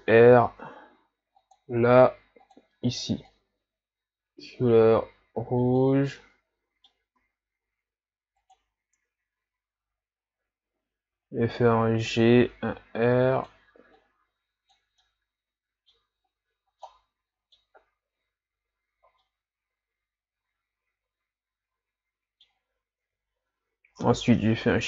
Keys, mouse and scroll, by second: 3.3 click, 6.2-7.2 middle drag, 7.2 s, 9.0 KP_3, 11.3 g, 12.6 r, 14.0-15.0 drag, 15.0-16.2 middle drag, 16.2-16.9 scroll up 3, 16.9-18.8 middle drag, 18.8-19.2 scroll down 2, 19.2-22.3 middle drag, 23.1 KP_3, 24.6 shift+d.